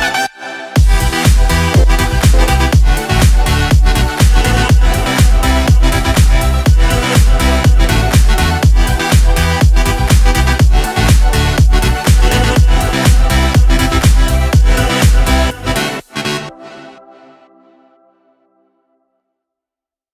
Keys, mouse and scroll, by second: 3.0 click, 4.4 click, 6.1 click, 7.9 click, 8.5-12.6 typing, 13.9 click.